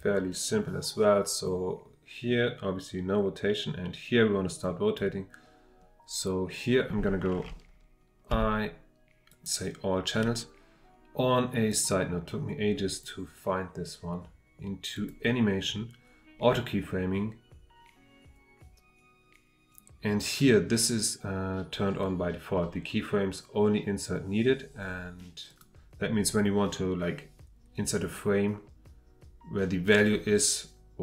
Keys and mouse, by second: 11.8-13.1 drag.